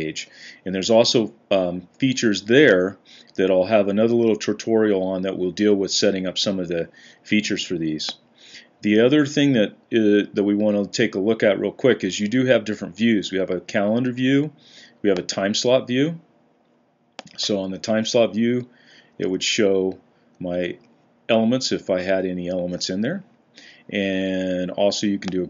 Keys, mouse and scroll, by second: 17.6-18.8 Down, 19.0 Down, 19.1-20.1 Down, 20.6 Up, 21.2 Up, 21.7 Up, 22.3 Up.